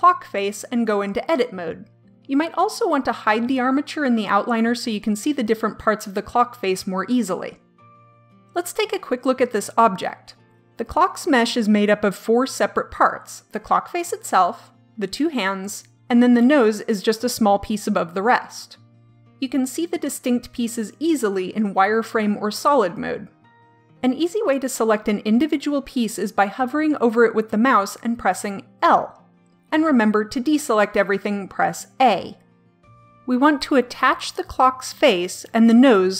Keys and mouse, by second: 0.1 click, 0.8 Tab, 4.4-6.4 drag, 28.6 l, 30.2 l, 32.0 a, 34.7 l.